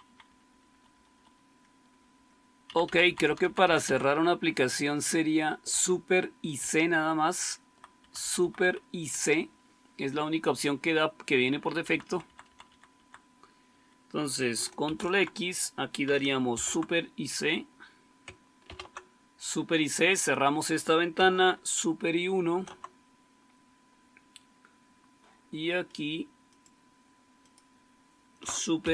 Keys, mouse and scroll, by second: 0.1 Up, 0.4 Up, 0.6 Up, 0.8 Up, 1.0-1.4 Up, 1.8 Up, 2.0 Up, 2.6 End, 2.8 Down, 2.9 Down, 3.2 Down, 3.4 Down, 3.6 Down, 3.8 Down, 5.6 Up, 6.5-7.6 Right, 7.9 Right, 8.1 Right, 8.3 Right, 8.5 Right, 12.0 Down, 12.2 Down, 12.4 Down, 12.6 Down, 12.9 Down, 14.7 ctrl+x, 16.4 ctrl+c, 18.5 super+c, 22.2 super+1, 28.8 super+c.